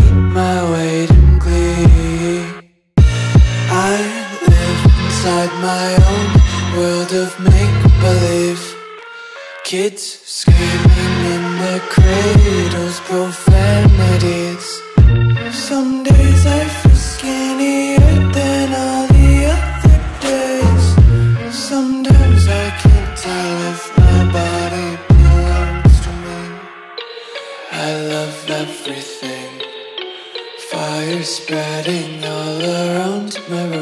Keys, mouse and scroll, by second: 10.0 right click, 13.1 click, 14.2 Delete, 19.3 click, 21.7-24.6 typing, 25.2 click, 28.3 click, 30.5 Return, 31.2 click.